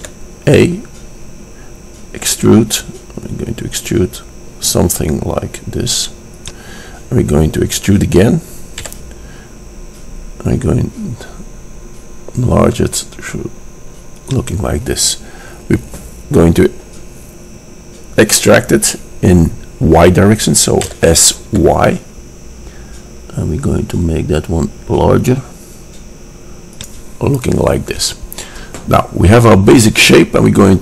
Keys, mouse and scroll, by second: 0.2 e, 7.6-9.6 middle drag, 9.6 click, 9.6 e, 20.9 s.